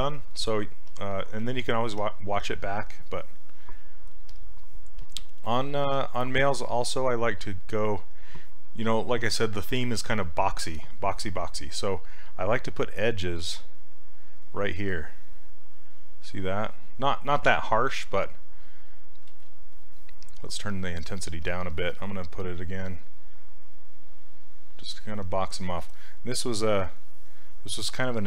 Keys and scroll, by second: 5.9 s, 19.3 ctrl+z.